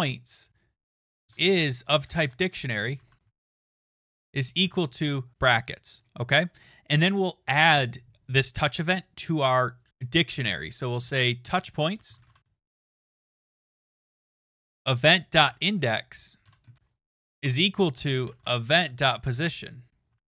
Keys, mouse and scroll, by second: 0.0-1.0 typing, 2.0-5.1 typing, 6.0 click, 11.7-18.8 typing.